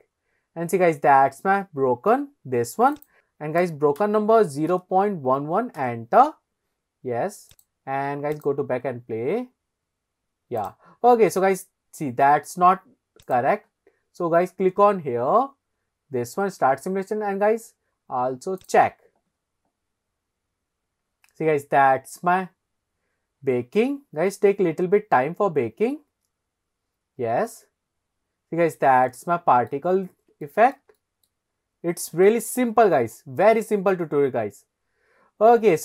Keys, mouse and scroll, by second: 2.9-5.9 drag, 5.4 KP_1, 7.5 click, 8.3 click, 10.7 click, 13.2 click, 18.6 click, 29.1-29.8 shift+middle drag, 29.9-30.3 scroll up 2, 30.5-30.8 shift+middle drag, 31.0 middle click, 31.6 scroll up 1, 32.0 shift+middle click.